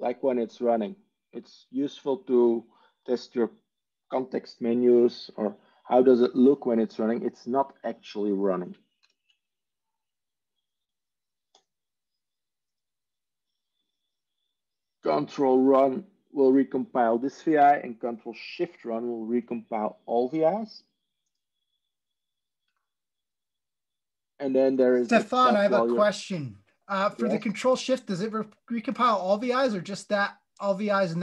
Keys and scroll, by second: 8.9 ctrl+m.